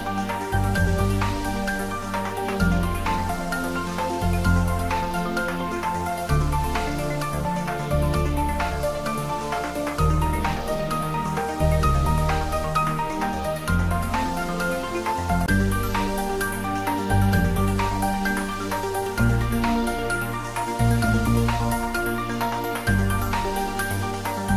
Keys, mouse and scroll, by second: 5.0 click, 8.1 click, 9.9-10.4 scroll down 1, 12.0 click, 12.5-13.5 scroll down 1, 17.6 click, 18.2 right click, 18.8 click.